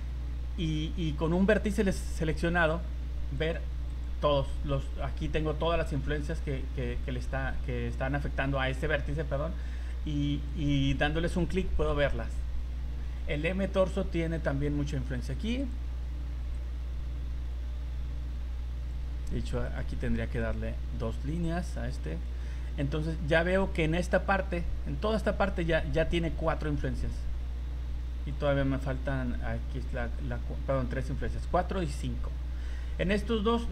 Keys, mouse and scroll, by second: 1.4 right click, 3.4 click, 3.9 click, 7.0 click, 10.5 click, 15.6 click, 19.6 click, 28.3 click, 31.6 click.